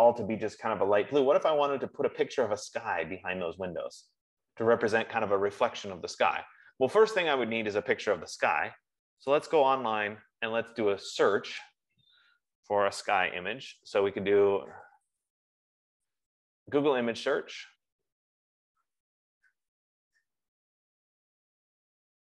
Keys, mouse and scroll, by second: 9.8 click, 11.9 click, 14.3-16.3 typing, 16.5 Return.